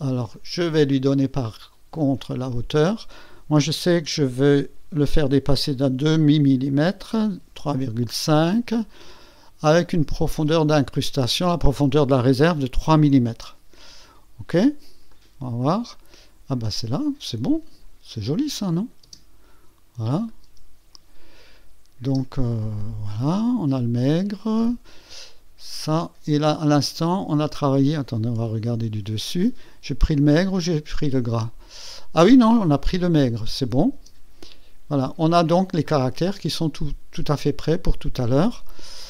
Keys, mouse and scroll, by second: 0.3 click, 2.3 click, 4.2 KP_3, 4.9 KP_3, 7.4 ,, 7.8 KP_5, 10.6 click, 12.7 KP_3, 15.1 click, 15.4 click, 15.9-17.0 drag, 18.8 click, 19.0 space, 20.2 click, 20.4 space, 22.0 space, 22.2 click, 26.5 space, 27.3 space, 28.4 KP_2, 30.4 scroll up 2, 33.9 space, 34.9 click, 35.8 click, 36.8 space, 38.8 click.